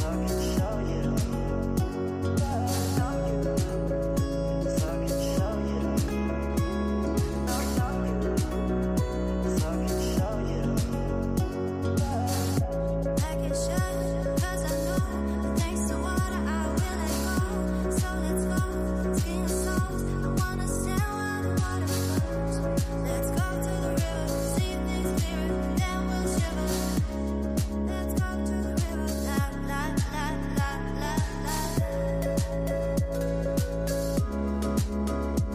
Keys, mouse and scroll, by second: 0.0-1.5 typing, 2.9-5.5 typing, 6.5 space, 6.7 space, 8.5 click, 9.9-11.0 drag, 11.0 scroll down 4, 12.3 click, 12.5 click, 12.9-13.5 scroll down 13, 14.0 click, 15.1 click, 15.7 click, 16.6-17.0 scroll down 6, 17.0-18.1 shift+middle drag, 18.1-21.4 drag, 22.9-23.4 scroll up 6, 23.5-24.3 shift+middle drag, 24.3 scroll up 3, 24.9 shift+middle click, 25.3 scroll up 4, 26.6-29.6 drag, 29.7-32.9 drag.